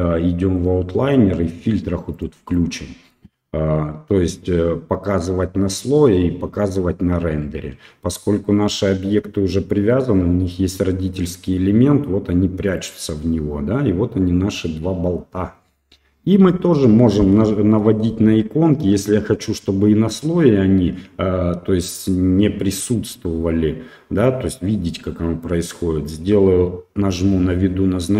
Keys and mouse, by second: 0.6-3.4 drag, 12.7 click.